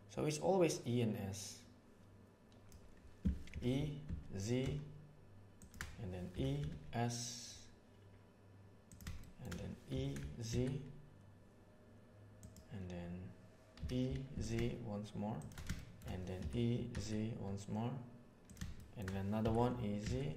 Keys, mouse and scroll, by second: 3.5 e, 9.2 shift+middle click, 9.8 e, 13.8 e, 15.7 middle click, 16.3 e, 18.7 shift+middle click.